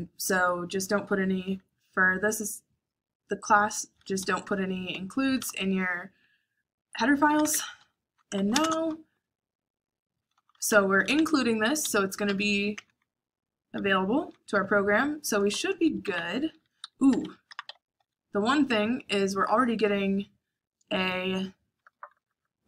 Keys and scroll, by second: 3.9-5.6 typing, 7.0-8.7 typing, 10.0-12.4 typing, 11.6 Escape, 14.4 Escape, 15.3-18.4 typing, 16.5 Escape, 17.9 Escape, 21.6-22.6 typing.